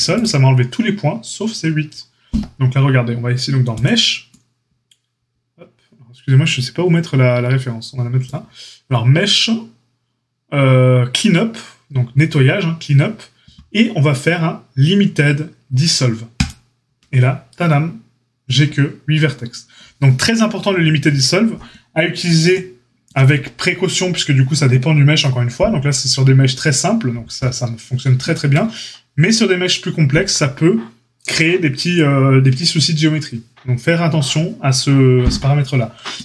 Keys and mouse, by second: 3.7-4.7 drag, 5.6-36.2 drag.